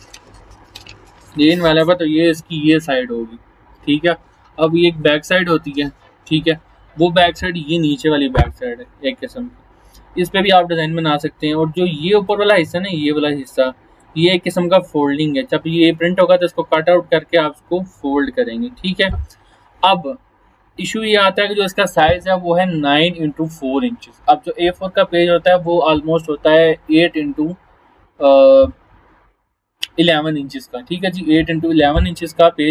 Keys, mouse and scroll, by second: 7.9 click, 8.8-10.6 scroll down 1, 10.8-12.3 scroll up 1, 12.3-14.1 drag, 19.6 scroll down 1.